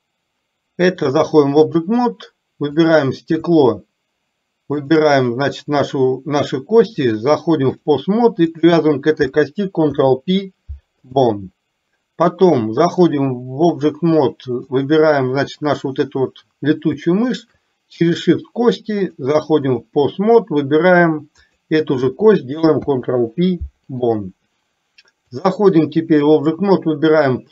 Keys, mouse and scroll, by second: 1.2 click, 2.8 click, 6.9-8.1 drag, 8.6 click, 9.9 ctrl+p, 13.2 click, 14.7 click, 15.4 click, 19.2 click, 21.4 click, 22.8 ctrl+p, 25.4-26.1 drag.